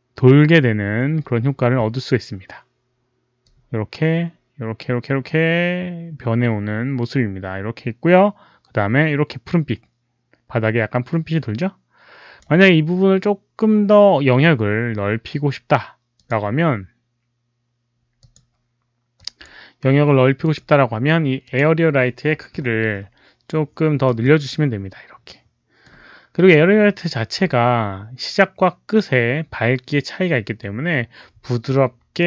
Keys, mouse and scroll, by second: 3.3-12.3 drag, 16.1 click, 18.1 click, 19.1 click, 20.3 click, 21.3 click, 24.1 r, 24.4-25.8 middle drag, 24.5 click, 24.5 r, 25.8 click, 25.8 r.